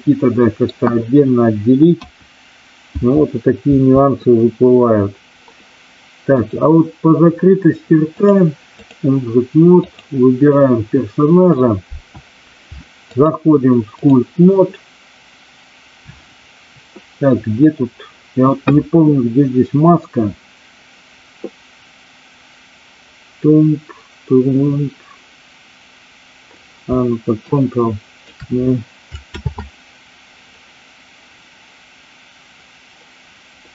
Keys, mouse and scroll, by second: 1.8 KP_1, 2.8 KP_2, 3.7 KP_3, 6.3 click, 8.1 click, 9.8 click, 13.1-14.2 drag, 27.4 ctrl+click, 29.3 ctrl+z.